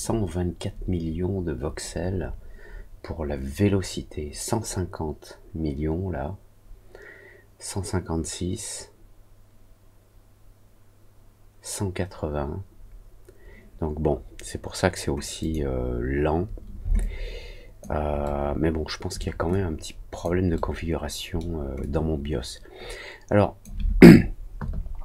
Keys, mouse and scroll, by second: 15.3 click, 16.9 alt+click, 18.2 alt+middle click, 19.4 alt+click, 21.7-23.6 alt+drag.